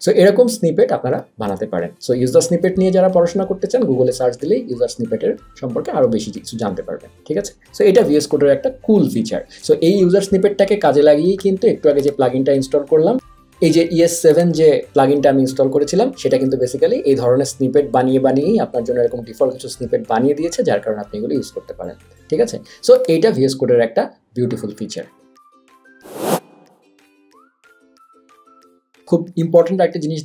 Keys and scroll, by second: 8.0 super+z.